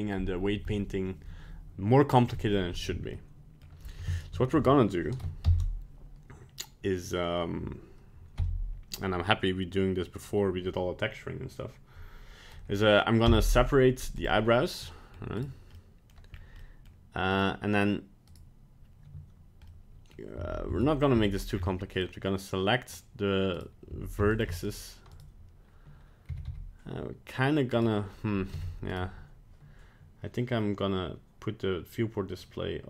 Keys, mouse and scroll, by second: 3.1 middle click, 4.1 shift+right click, 5.4 ctrl+l, 8.3 p, 14.9 middle click, 15.4 right click, 15.7 middle click, 16.3 scroll up 1, 16.6 middle click, 17.3 right click, 18.2 right click, 19.6 middle click, 20.4 a, 20.7 a, 21.1 c, 23.9 c, 25.1 right click, 26.3 g, 28.5 Tab, 28.9 right click.